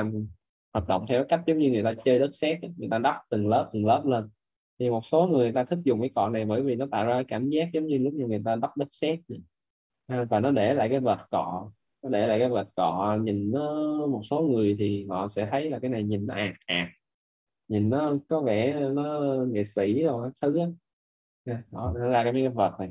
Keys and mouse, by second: 4.3 click, 21.8 right click.